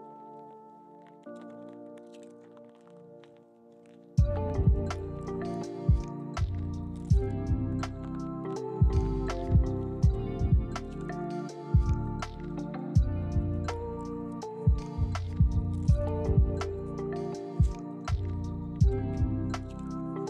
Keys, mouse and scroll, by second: 0.0 1, 0.3 scroll up 1, 0.8 g, 1.3 ctrl+click, 1.4 scroll up 1, 1.5 shift+middle click, 1.8 g, 3.0 ctrl+click, 3.1 scroll down 1, 3.3 middle click, 19.0 scroll up 2, 19.2 shift+middle click, 19.2 shift+scroll down 1, 19.3 scroll up 1, 19.4 shift+middle click.